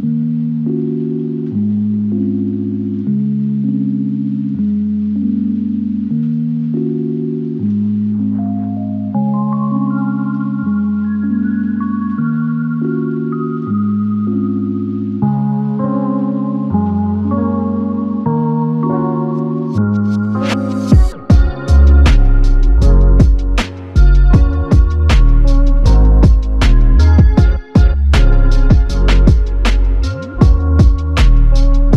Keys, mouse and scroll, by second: 2.3-3.6 typing, 8.2 double click, 12.3-13.2 typing, 14.6 double click, 19.0 alt+click, 20.2 double click, 21.8 click, 22.0 alt+click, 23.8 double click, 25.8 double click, 26.0 alt+click, 28.2 double click, 30.4 double click, 31.2 alt+click.